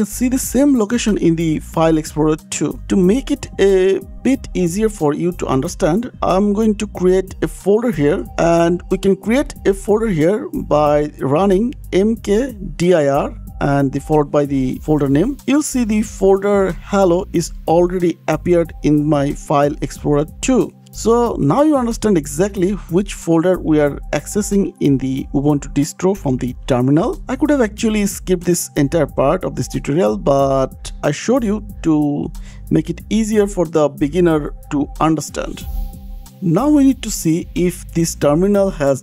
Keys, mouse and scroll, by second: 0.9 click, 3.0 click, 4.4 click, 11.4-14.9 typing, 18.6 click, 20.7 click, 21.5 click, 28.8 click, 36.2 click, 36.2 scroll down 8, 36.7 click.